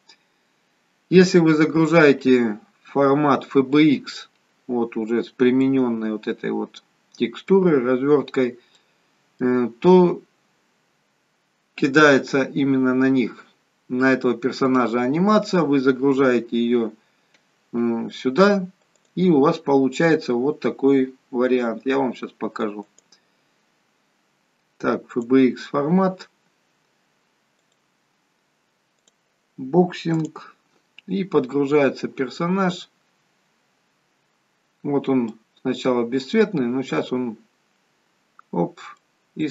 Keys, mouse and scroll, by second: 4.8-5.6 scroll up 1, 5.6 middle click, 5.6-7.6 scroll up 2, 7.6-8.6 scroll down 2, 9.4 middle click, 19.0 click, 33.9-34.5 scroll down 1, 34.8-36.1 scroll up 2, 35.3 middle click, 38.9 middle click, 38.9-39.5 scroll up 2.